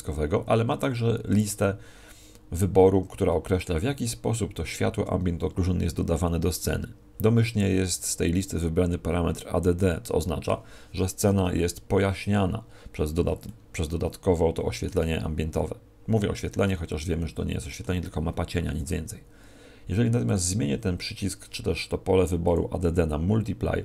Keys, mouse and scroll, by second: 1.3 click.